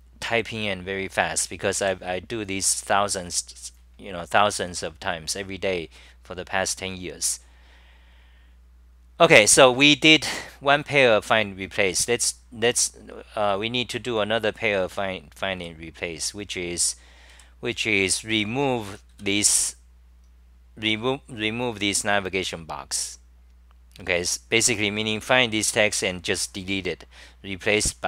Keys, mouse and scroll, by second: 17.8-18.5 typing.